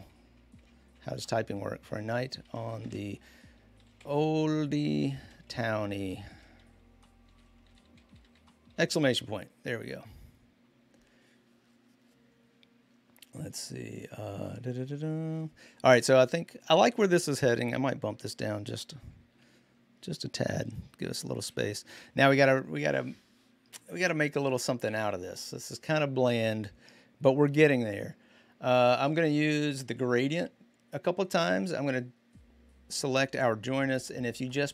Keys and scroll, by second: 0.0-8.0 typing, 14.3 shift+1, 20.4 shift+Down, 21.2 shift+Up, 21.7 shift+Up.